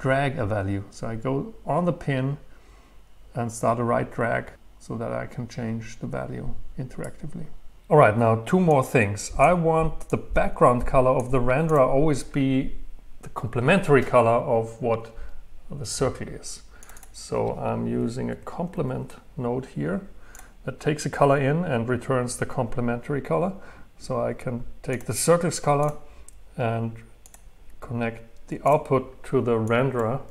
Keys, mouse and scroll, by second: 0.0 right click, 0.4-4.3 drag, 4.3-6.8 right drag, 9.0-14.0 drag, 16.9-19.2 drag, 20.3-22.6 drag, 25.0-30.3 drag.